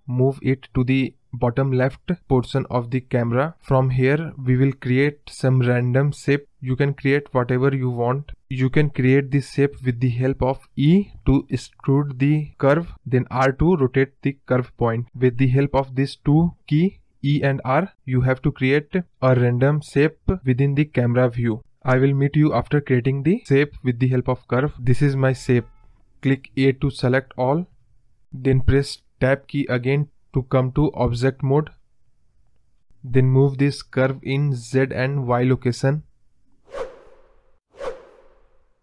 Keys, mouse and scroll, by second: 1.2-1.9 scroll down 3, 1.9 scroll up 1, 2.1-3.0 scroll down 1, 3.0 e, 6.8 r, 9.7 e, 13.3 e, 14.6 r, 16.7 e, 17.7 r, 23.9 Tab, 25.8 a, 31.1-32.2 scroll up 2, 32.2 middle click, 32.4 scroll down 2, 32.6 middle click, 32.9-33.3 scroll up 5, 33.3 scroll down 4, 33.5 middle click, 34.0 Tab, 34.3-34.8 scroll down 2, 34.8 KP_0, 35.9 click, 36.3 click, 37.2 click, 38.7 click.